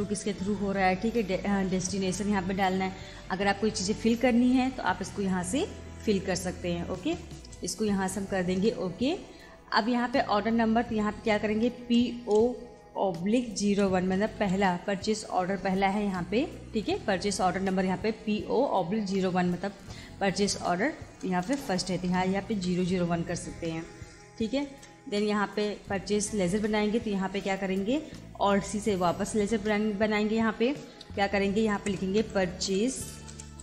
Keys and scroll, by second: 6.9 Return, 11.8 shift+p, 12.2 shift+o, 13.7 /, 14.4 1, 21.5 BackSpace, 22.1 0, 24.7 Return, 28.9 alt+c, 31.8 shift+p, 32.2 u, 33.5-33.6 typing.